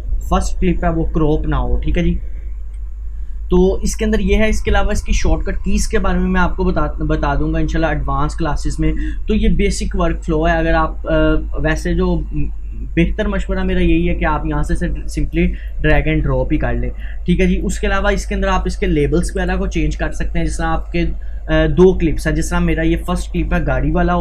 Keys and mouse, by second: 1.3 click, 2.7 Delete, 3.6-6.6 drag, 6.6-13.5 drag, 14.0-16.1 drag, 16.1 Delete, 17.1-19.4 drag, 19.4 right click, 20.7-24.2 drag.